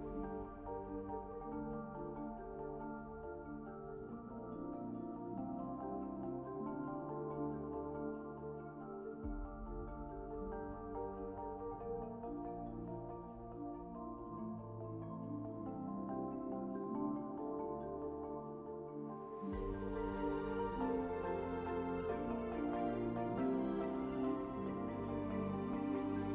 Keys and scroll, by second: 22.7 ctrl+1.